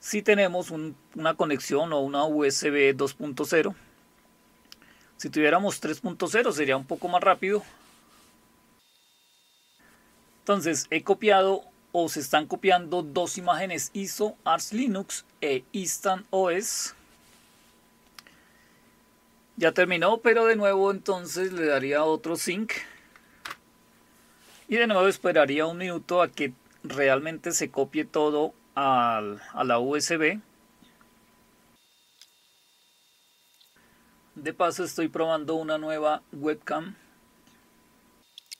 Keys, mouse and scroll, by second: 21.4 click, 22.9 Up, 23.4 Return.